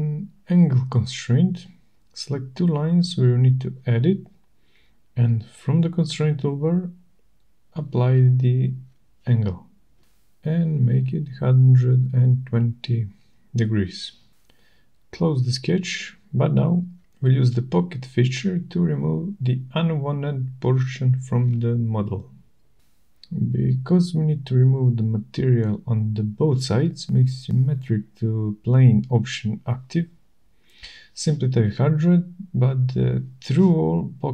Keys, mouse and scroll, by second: 1.7 click, 3.4 click, 4.7 click, 6.7 click, 8.9-10.4 typing, 13.7 click, 16.9 click, 17.5 click, 18.2-19.4 scroll, 24.3 click, 26.5 click, 28.7-29.3 scroll, 31.2 click, 31.7-32.6 typing, 33.1 Return, 34.2 typing.